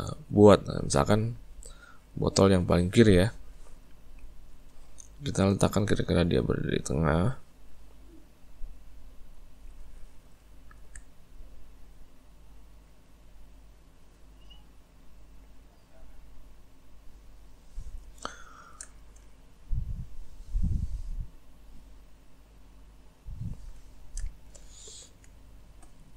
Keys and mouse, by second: 3.0-4.5 shift+middle drag, 4.5 click, 7.6 click, 10.5 ctrl+middle click, 11.8 click, 18.5-20.0 ctrl+middle drag, 20.0 click, 23.9-26.1 ctrl+middle drag.